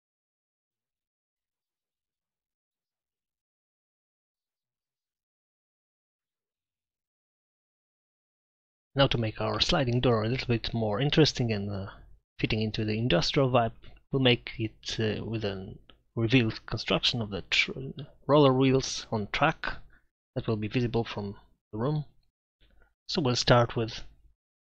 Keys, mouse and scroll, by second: 0.7 middle click, 1.5 right click, 2.0-3.8 drag, 2.0-2.4 right drag, 13.5-15.2 middle drag, 17.1-18.1 drag, 20.7 shift+a.